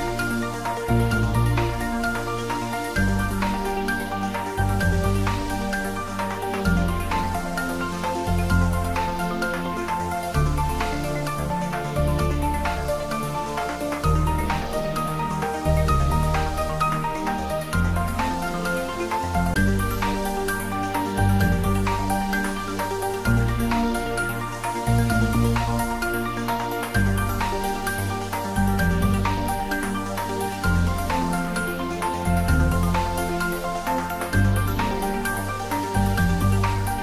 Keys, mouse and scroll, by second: 0.9 y, 4.5 click, 4.7-5.7 typing, 7.4 click, 8.8 scroll up 1, 10.9 3, 11.5 scroll down 1, 12.9-13.9 typing, 15.4 click, 15.8-19.3 middle drag, 19.3 click, 23.6 e, 25.4 click, 25.8 scroll up 1, 26.2-27.6 middle drag, 27.6 ctrl+b, 29.4-31.1 scroll up 1, 31.1 click, 31.5-33.0 middle drag, 33.0 Tab, 33.4-33.9 scroll up 1, 33.9-35.7 middle drag, 35.7 scroll down 1, 36.0 middle click, 36.7 Tab.